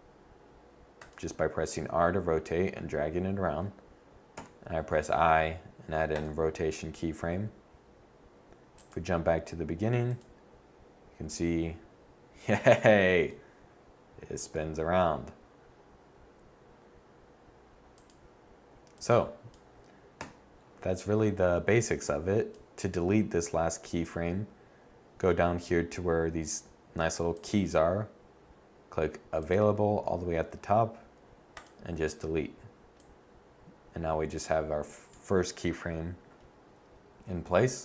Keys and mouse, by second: 4.1 i, 17.7-18.9 drag, 20.0 KP_7, 35.0-35.4 drag, 37.6-37.8 drag.